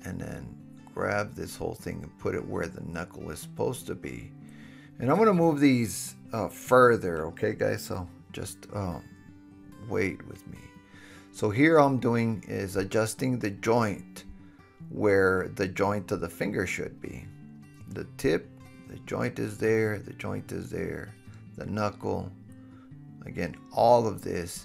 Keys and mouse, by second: 0.0-1.5 drag, 0.2 g, 1.5 shift+middle click, 1.5-2.9 shift+drag, 2.0 g, 2.5 super+z, 3.4 g, 4.0 click, 8.1 g, 8.6 click, 9.5 g, 10.1 click, 10.4 g, 11.4 drag, 11.7 g, 12.4 drag, 12.8 g, 13.6 drag, 14.0 g, 14.9 click, 15.3 g, 16.1 click, 17.0 g, 17.5 click, 18.3 g, 19.0 drag, 19.5 drag, 19.5 g, 20.0 g, 20.4 click, 21.0 g, 21.5 click, 21.9 g, 22.3 click, 23.1 g, 23.7 click, 24.4 g.